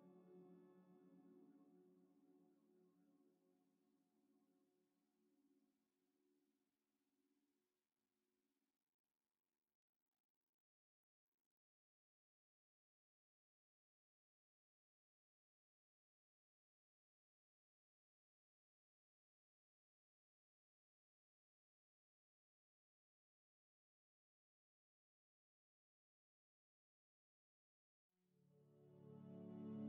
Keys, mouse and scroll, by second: 8.7 click.